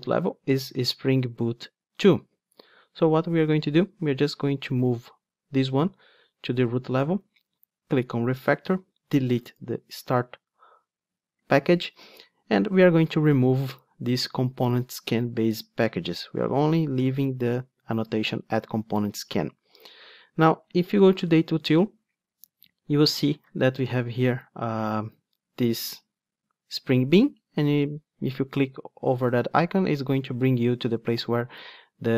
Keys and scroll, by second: 9.4 Delete.